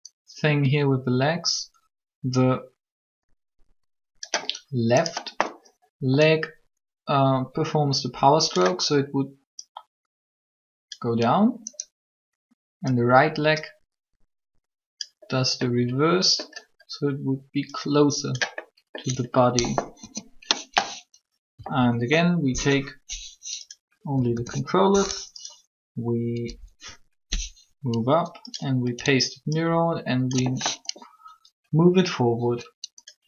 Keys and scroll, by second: 19.7 3, 21.5 a, 21.8 a, 24.1 a, 24.2 a, 27.6 Up.